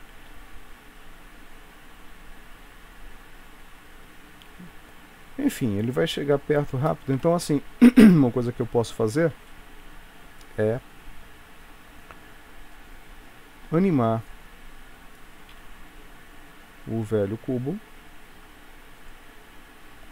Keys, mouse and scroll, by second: 0.3 space, 4.4 Escape, 6.7 click, 7.2 KP_3, 9.6 shift+middle click.